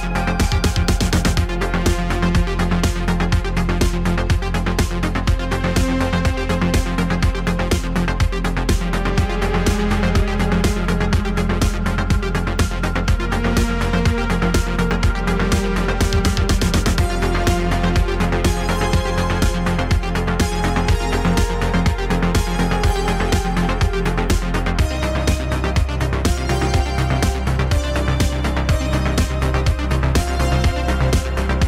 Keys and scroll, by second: 3.9 e, 6.7 e, 8.8 g, 11.0 e, 12.2 e, 15.4 e, 17.1 e, 18.2 e, 23.5 g, 24.4 g, 25.8 g, 27.9 g, 28.5 g, 29.1 g.